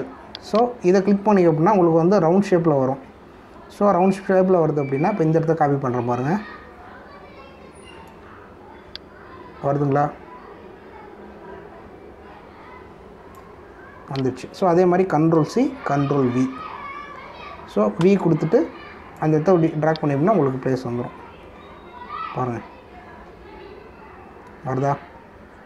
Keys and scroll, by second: 16.3 ctrl+c, 16.9 ctrl+v, 19.0 v.